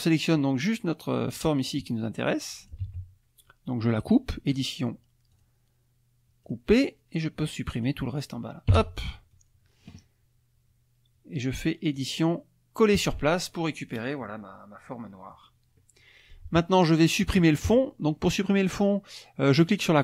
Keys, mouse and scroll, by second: 0.1 click, 1.2-2.9 drag, 2.9 ctrl+z, 5.3 click, 6.4 click, 7.3 click, 8.7 Delete, 12.0 click, 12.9 click, 15.3 click, 16.0 click, 19.6 click.